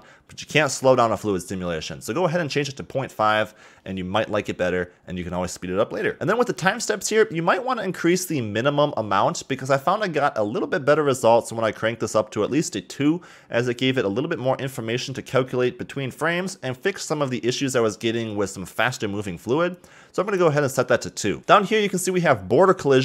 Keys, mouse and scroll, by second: 20.3 click, 21.4-22.0 scroll down 4.